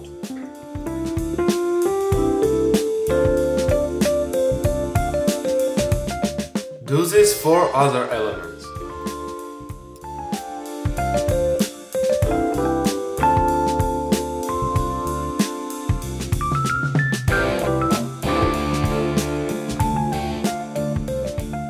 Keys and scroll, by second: 12.8 z, 14.6 space.